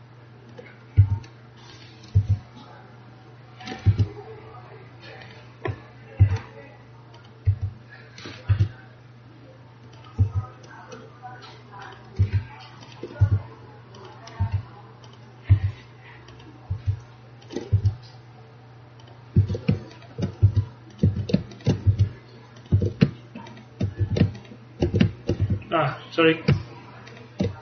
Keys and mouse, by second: 1.1 click, 1.1 e, 2.3-3.5 drag, 2.3 r, 4.0 g, 6.3 e, 7.6 r, 8.6 g, 10.3 e, 12.3 r, 13.3 g, 14.5 r, 15.6 e, 16.8 r, 17.8 g, 19.5 a, 20.5 g, 21.1 a, 21.9 g, 22.9 a, 24.1 a, 24.9 alt+a, 25.5 a.